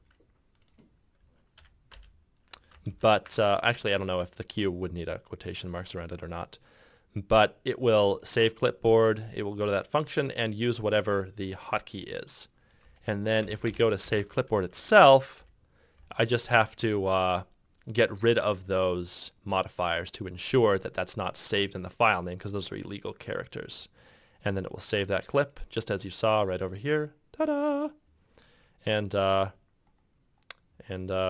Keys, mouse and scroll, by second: 1.7 q, 3.0 ctrl+z, 13.1 z, 15.1 F2, 15.5 F2, 16.1 F2, 16.7 F2.